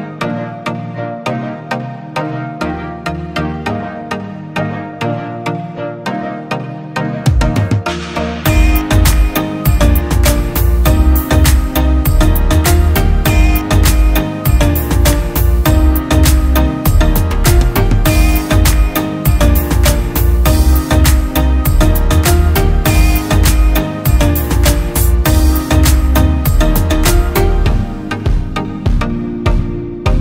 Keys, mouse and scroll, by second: 5.1 ctrl+t, 7.1 alt+shift+click, 10.8 alt+shift+click, 23.2 Right, 23.4 Right, 24.2 Left, 24.5 Return.